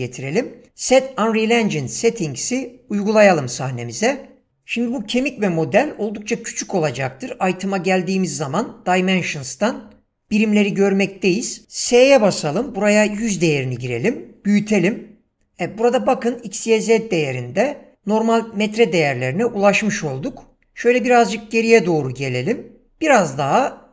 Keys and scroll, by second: 12.1-13.7 typing, 13.8 Return, 23.2 s.